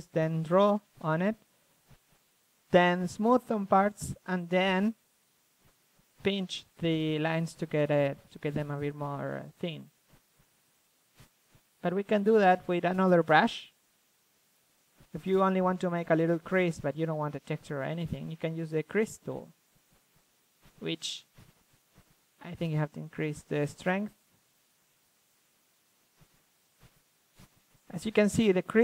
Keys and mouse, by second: 1.3-1.6 middle drag, 1.9-3.3 middle drag, 3.3-4.7 drag, 5.2 ctrl+z, 6.8 middle click, 7.0-7.8 drag, 8.7 f, 8.8-10.2 drag, 10.2-10.6 middle drag, 12.0-13.1 middle drag, 13.2-14.6 middle drag, 14.6-15.0 drag, 14.6 KP_1, 16.3-16.6 middle drag, 17.1-19.5 drag, 19.2 KP_1, 19.5-20.0 middle drag, 20.0 shift+space, 20.3 KP_3, 20.6 KP_1, 22.9-24.5 drag, 25.5 click, 26.5-27.0 drag, 27.0 z, 27.3 drag, 27.5 z, 28.3 shift+f.